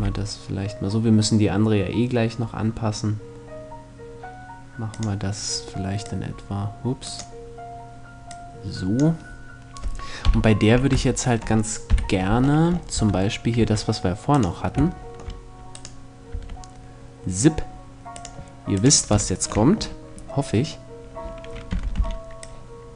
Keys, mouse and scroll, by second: 5.0-7.5 drag, 7.9-9.7 drag, 9.8 KP_7, 10.8 middle click, 11.5 KP_5, 12.6 Tab, 13.2 Tab, 16.0 Tab, 18.9 click, 19.8-21.4 middle drag, 21.4 z, 21.6 b.